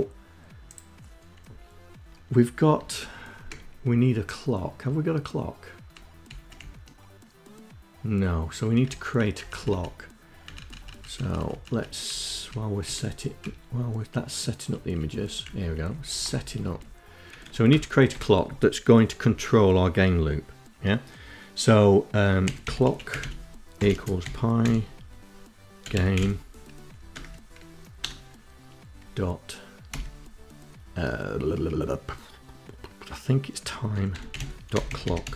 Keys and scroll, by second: 1.7 Left, 2.5 Up, 5.2 Up, 5.5 Down, 7.9 Up, 8.3 Up, 8.6 Up, 9.4 Up, 9.6 Up, 9.8 Up, 10.2 Up, 11.1 Up, 11.2 Up, 11.3 Up, 11.8 End, 12.3 Up, 13.9 Up, 14.1 Up, 14.4 Down, 14.6 Down, 15.0 Down, 15.2 Down, 15.3 Down, 15.5 Down, 15.6 Down, 16.2 End, 16.6 Return, 21.1-26.9 typing, 28.8 ., 32.5-35.2 typing.